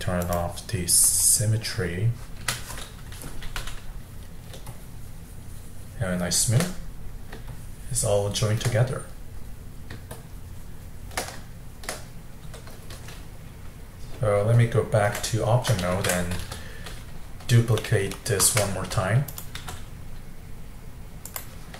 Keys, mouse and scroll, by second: 2.6 n, 3.6-4.7 middle drag, 4.7-6.8 shift+drag, 6.8 middle click, 7.5-8.8 shift+drag, 8.8-10.2 middle drag, 10.2-11.6 shift+drag, 11.6-16.0 shift+middle drag, 16.0 ctrl+Tab, 17.8 middle click, 18.4 shift+d, 19.6 r.